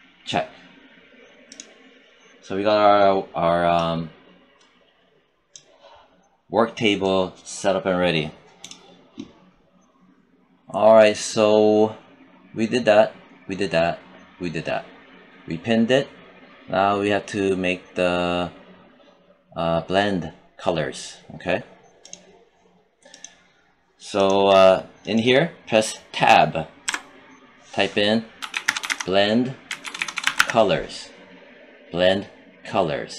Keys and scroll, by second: 26.8 Tab, 28.3-30.2 typing.